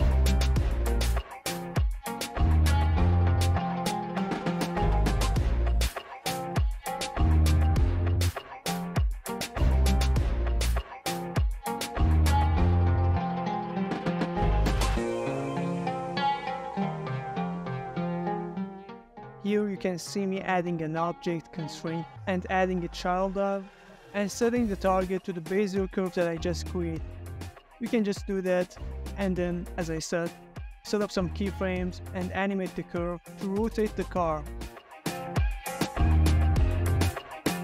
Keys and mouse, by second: 0.0 middle click, 0.4 shift+middle click, 1.0 ctrl+middle click, 1.6 z, 2.5 z, 3.5 z, 4.6-5.0 middle drag, 5.1 shift+middle click, 5.8 click, 6.7-7.1 shift+middle drag, 7.5 shift+middle click, 9.1 shift+middle click, 12.6-17.2 drag, 18.4-20.1 drag, 22.5-26.0 drag, 26.5 ctrl+middle click, 26.8-27.2 ctrl+middle drag, 27.3 ctrl+middle drag, 27.6-27.9 middle drag, 28.2-28.6 middle drag, 29.1 click, 31.7 x, 33.5-34.0 middle drag, 34.7 click, 35.7-36.0 middle drag, 36.2 ctrl+middle click, 37.5 click.